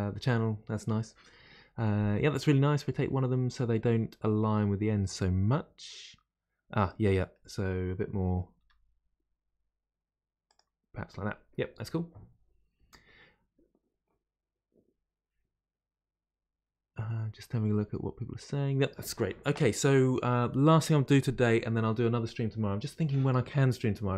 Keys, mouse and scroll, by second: 6.8-8.6 middle drag, 8.6 r.